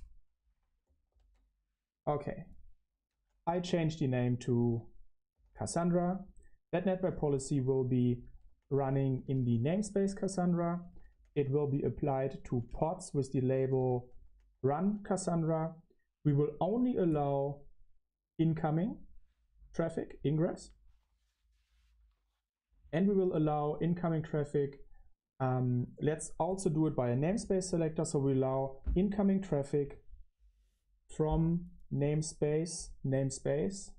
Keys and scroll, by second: 1.0 ctrl+alt+shift+3, 4.1 ctrl+c, 4.5 ctrl+d, 5.0-15.0 typing, 11.6 Return, 15.3 Return, 33.6-33.9 typing.